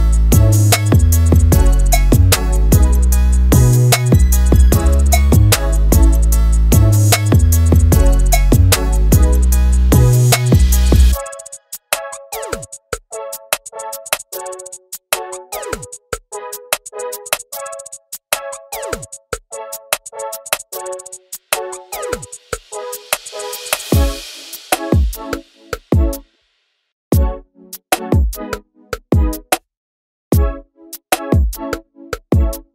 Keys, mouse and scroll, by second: 1.3 click, 3.0 click, 3.3 scroll down 1, 3.6-4.6 shift+middle drag, 4.6 alt+d, 8.5-9.5 shift+middle drag, 9.5 Tab, 10.0 click, 10.8 click, 14.0 ctrl+z, 14.7 Tab, 15.7 x, 16.3 click, 17.6 shift+d, 21.5 r, 23.8 s, 25.3 shift+d, 26.2 Tab, 26.8 click, 27.6 click, 30.2-31.7 scroll up 3, 31.7 click, 32.3 click.